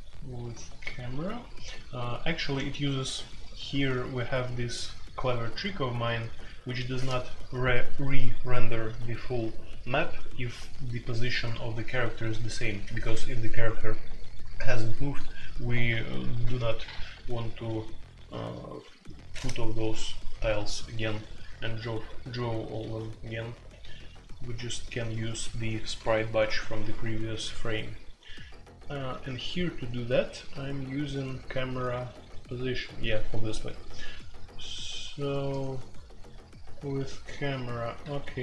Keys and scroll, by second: 2.5-4.5 typing, 29.5-30.9 typing, 34.6-37.5 typing.